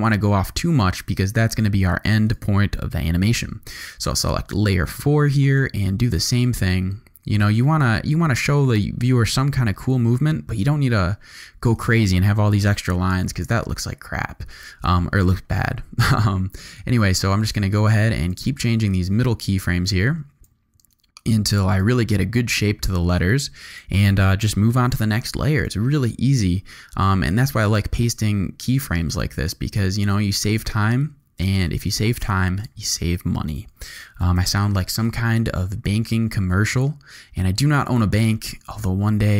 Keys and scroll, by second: 3.1 u, 12.7 u, 25.1 u, 34.3 u.